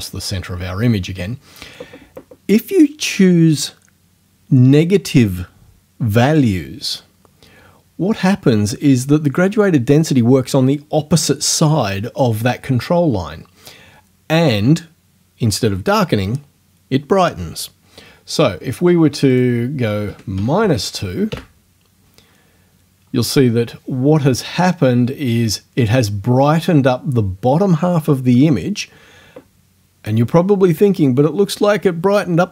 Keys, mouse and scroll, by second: 19.3 click, 20.1 KP_Subtract, 20.4 KP_2, 21.3 KP_Enter.